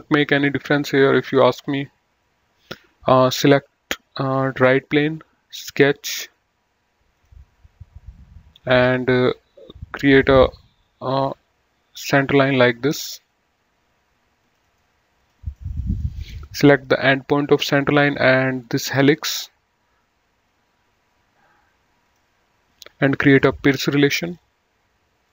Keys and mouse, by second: 1.5 click, 4.6 click, 7.4 click, 10.5 click, 12.5 click, 14.7 click, 14.9 right click, 15.5 click, 15.9 middle click, 17.2 click, 18.7 ctrl+click, 22.3 ctrl+click, 23.5 click.